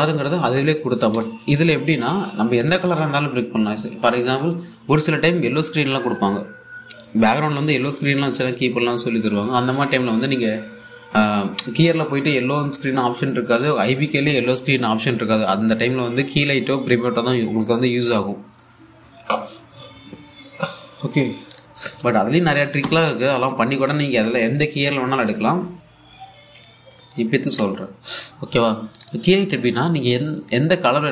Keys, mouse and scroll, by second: 2.6 click, 3.6 1, 4.8 alt+click, 22.2 alt+Num_Lock, 22.3 alt+click, 29.3 click, 30.2 1.